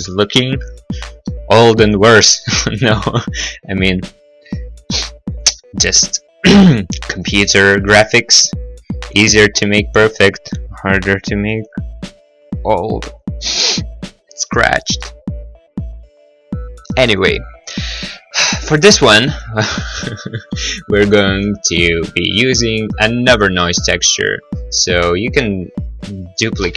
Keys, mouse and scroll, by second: 1.7 middle click, 1.9 middle click, 2.1-3.8 scroll, 6.3 right click, 15.0 middle click, 15.7 middle click, 18.5 right click, 18.6 right click, 19.3 right click, 19.5 right click, 21.0 right click, 21.2 right click, 21.8 shift+right click, 21.8 shift+right click, 24.0 g, 26.3 click, 26.4 click, 26.7 shift+d.